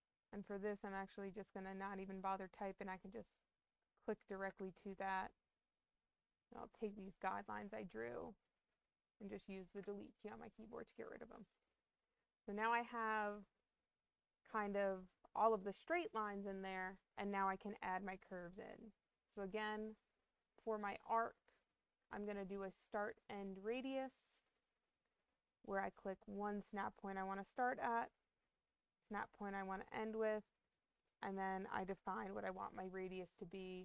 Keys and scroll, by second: 4.4 Escape, 31.7 2.